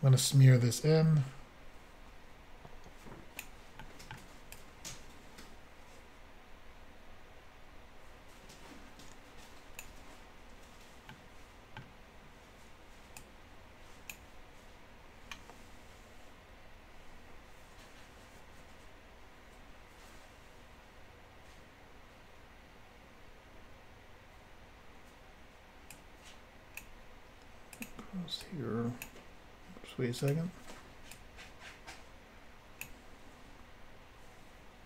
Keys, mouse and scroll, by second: 0.3 click, 3.8 middle click, 4.6 click, 10.6-11.0 scroll down 1, 11.1 middle click, 13.2 click, 25.9 click, 27.8 click, 27.8 click, 28.4 click, 30.2 click, 30.3 click, 31.1 click.